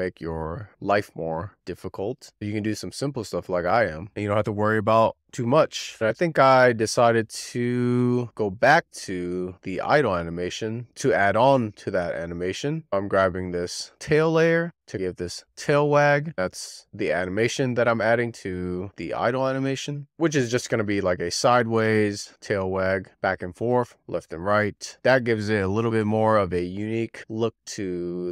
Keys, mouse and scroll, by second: 2.5 click, 3.7 click, 4.9 click, 5.8-6.1 scroll down 2, 6.1 click, 7.2-10.4 drag, 12.9 click, 13.3-16.0 middle drag, 16.0 e, 16.6-18.9 middle drag, 18.9 click, 20.3 z, 20.6-22.9 middle drag, 22.9 click, 24.9 z, 25.2-27.3 middle drag.